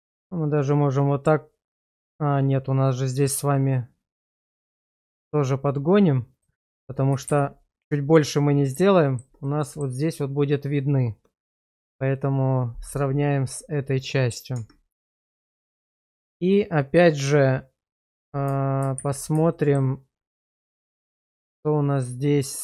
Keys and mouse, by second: 6.3 click, 7.5 shift+x, 7.5 shift+z, 8.2 middle click, 9.0 shift+middle click, 9.5 middle click, 14.0 middle click, 14.5 Tab, 15.4 middle click, 19.0 shift+z, 19.5 shift+middle click, 20.5 middle click, 21.4-22.0 middle drag, 22.2 middle drag.